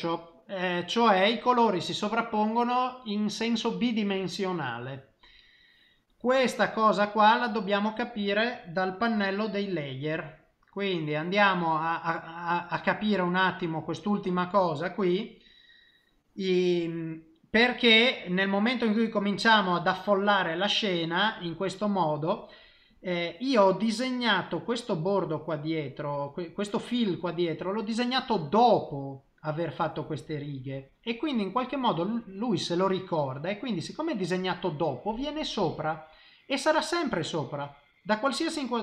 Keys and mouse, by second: 13.3 click, 17.4 middle click, 22.8 middle click, 33.2 middle click, 37.2 middle click.